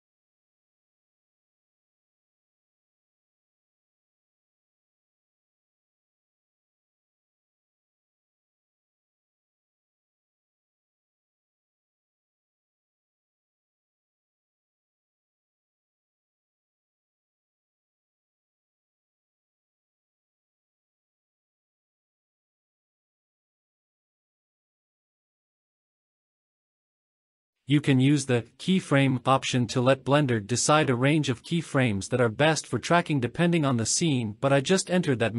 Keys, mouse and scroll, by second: 2.5 click, 6.8 click, 8.9 click, 11.3-12.3 drag, 12.9 click, 16.2-19.1 drag, 19.9-20.5 drag, 22.8 scroll down 2, 24.2 click, 28.1-30.1 drag, 31.0-32.2 drag, 33.7 click, 34.6-35.3 drag.